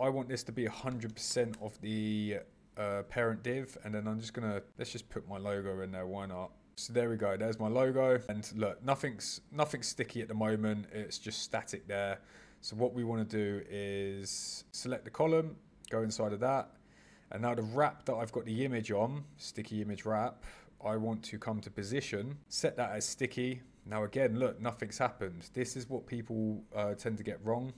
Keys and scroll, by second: 1.2 shift+5.